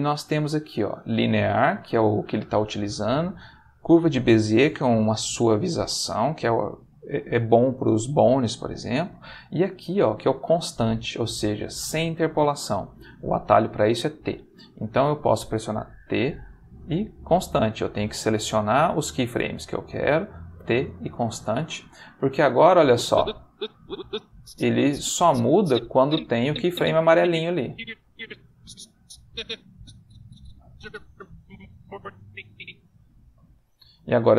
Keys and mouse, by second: 16.0 t, 18.4-20.1 drag, 20.5 t, 21.0 click, 22.8-33.7 drag.